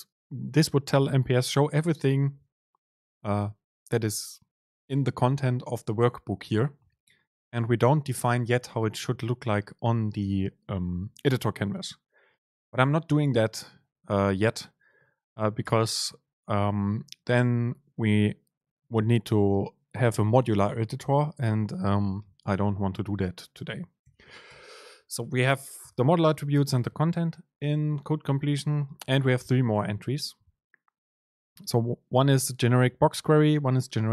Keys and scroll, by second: 13.7 ctrl+shift+super+Left, 15.7 shift+super+Left, 17.4 BackSpace, 17.5 super+space.